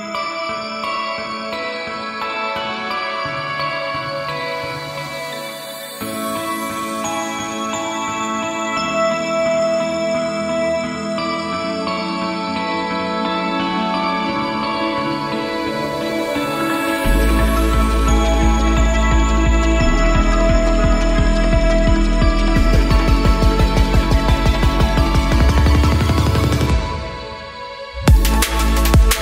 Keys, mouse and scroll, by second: 0.5 KP_5, 0.6 KP_1, 1.0 middle drag, 1.5-2.1 drag, 2.7-4.5 drag, 4.8 click, 5.4 middle click, 5.9-6.5 drag, 6.8-7.9 drag, 8.3 click, 10.1-10.5 drag, 10.6-11.0 drag, 10.9 middle click, 11.9-12.3 drag, 12.3 middle click, 12.9-14.1 drag, 14.8 middle drag, 16.0 click, 16.4-16.8 middle drag, 17.3 click, 17.9 middle click, 19.9 click, 20.8 click, 21.7-23.2 middle drag, 23.2-23.6 drag, 25.5-26.9 drag, 26.4 typing, 27.1-28.3 drag, 28.3 middle click, 28.9 click.